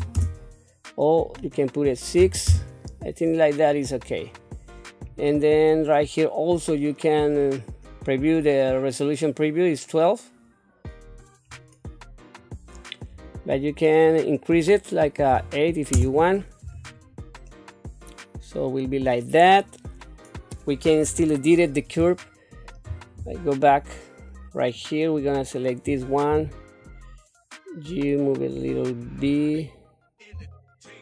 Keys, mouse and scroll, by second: 1.3-2.5 drag, 4.5-5.7 scroll up 6, 11.1-12.4 scroll down 3, 12.4-15.9 drag, 17.5-19.4 middle drag, 19.6-20.6 middle drag, 21.0 KP_3, 22.1 shift+middle click, 23.2 Tab, 24.7 click, 26.3 g, 30.3 g.